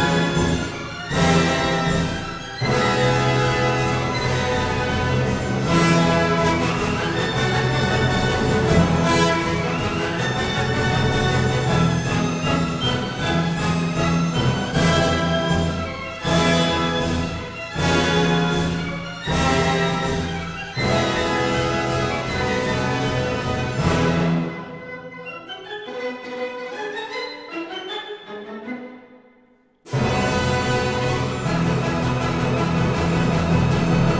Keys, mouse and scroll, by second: 0.8 click, 2.3 click, 4.2 click, 4.9 click, 6.1 click, 7.5 click, 10.6 click, 13.2 click, 13.9 click, 14.6-15.0 scroll, 15.8 s, 16.8 click, 17.9 click, 19.2 click, 19.6 Escape, 19.9 s, 21.0 click, 22.3 click, 23.1 click, 25.3-25.6 typing, 26.1 Return, 31.5-32.5 scroll, 33.2 ctrl+click, 34.1 scroll.